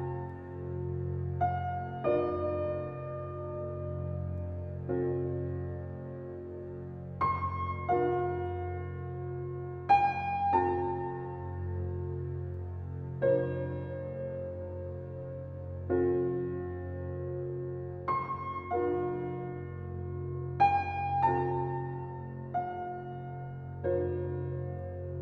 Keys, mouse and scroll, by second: 0.6 scroll up 1, 0.9 alt+click, 2.0 alt+right click, 2.4 alt+click, 2.7 alt+middle click, 2.8 alt+middle click, 3.2 alt+right click, 3.6 alt+middle click, 4.6 alt+right click, 5.5 alt+click, 6.1 alt+right click, 6.5 alt+middle click, 7.0-8.6 alt+right drag, 8.6 click, 11.7 right click, 12.5 click.